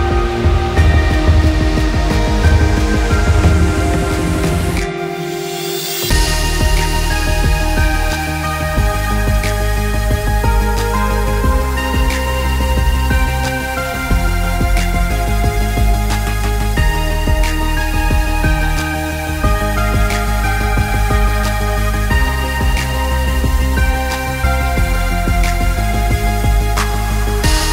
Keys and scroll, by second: 0.2 ctrl+shift+p, 2.4 b, 14.1 b, 16.2 b.